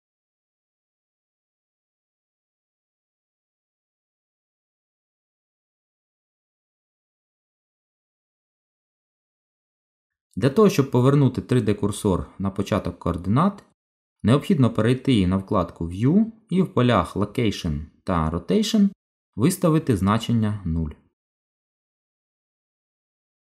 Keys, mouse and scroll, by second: 1.9 shift+a, 7.8 Delete, 14.1 n, 16.8 click, 20.7 click, 23.0 click.